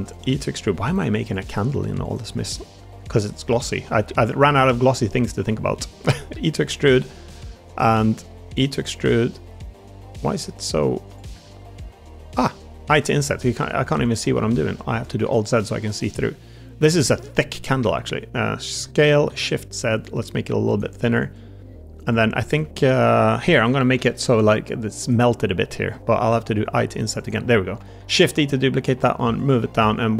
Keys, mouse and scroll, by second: 0.0 click, 0.0 e, 1.3 middle click, 1.3 e, 2.8 i, 11.2 ctrl+z, 11.2 e, 12.2 click, 12.8 i, 14.2 alt+z, 14.6 click, 14.8 middle click, 15.2 shift+click, 15.8 click, 17.0 ctrl+KP_Add, 18.6 ctrl+KP_Add, 18.6 s, 19.2 shift+z, 26.3 a, 26.3 g, 26.3 i, 27.9 shift+d, 28.3 s, 29.5 click.